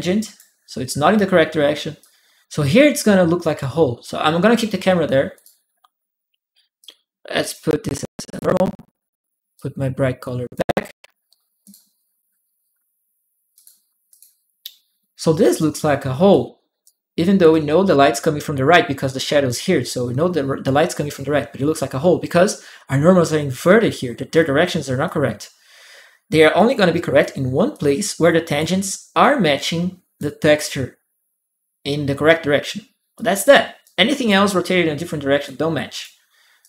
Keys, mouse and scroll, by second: 1.8 click, 5.1 click, 6.6 click, 8.0 alt+click, 9.3 alt+click, 11.4 alt+click, 13.3 alt+click, 13.9 alt+click, 16.1 alt+click, 17.3 right click, 24.8-27.5 drag, 26.3 right click, 27.5 right click, 28.3 click, 29.6 click, 32.9-34.3 drag, 33.6 right click, 35.2 click, 35.2 right click, 35.8 click.